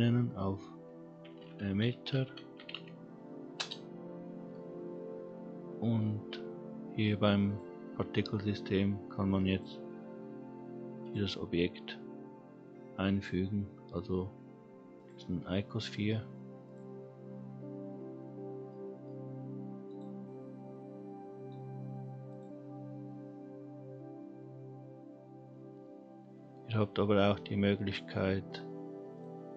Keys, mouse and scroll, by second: 2.2 t, 7.4 click, 9.5-11.1 drag, 13.5-14.9 scroll down 2, 14.9 click, 17.4-18.0 scroll up 2, 18.7 middle click, 19.9 click, 20.4-21.7 scroll up 3, 22.3 click, 29.1 click.